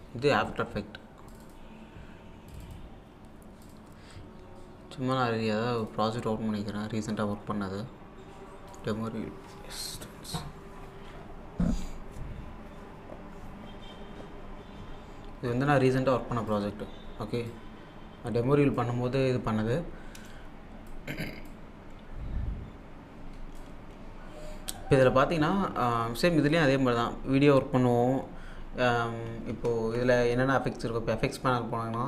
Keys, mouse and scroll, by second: 1.3 click, 5.8 click, 8.7 click, 9.9 click, 16.5-19.9 drag, 20.3-29.4 drag, 29.5 alt+Num_Lock, 29.5 click, 29.9 alt+Tab.